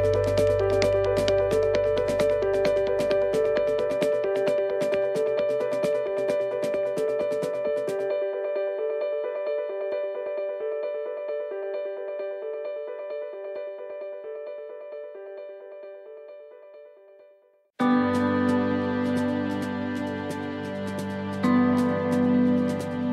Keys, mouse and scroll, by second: 15.0 click, 19.4 click, 22.1 click.